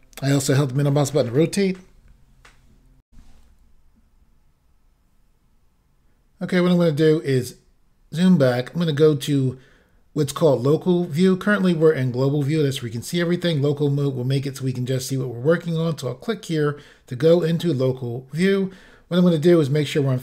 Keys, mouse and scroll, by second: 3.1 Insert, 6.8-8.1 scroll down 1, 17.3 click, 18.4-19.1 scroll down 2, 19.9 middle click.